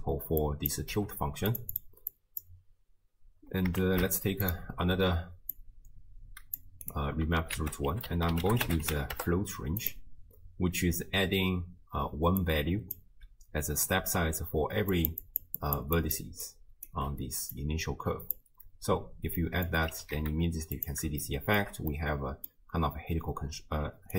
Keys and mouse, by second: 0.4 click, 0.9 g, 1.8-2.5 drag, 3.9 ctrl+shift+d, 5.6-6.9 drag, 7.6 ctrl+a, 12.0-17.0 typing, 12.4 click, 14.9 click, 15.2 click, 15.6 click, 16.2 drag, 16.4 click, 17.6-18.4 drag, 19.5 middle click, 20.0 g, 21.4 shift+middle click, 22.1 middle click, 23.9 d.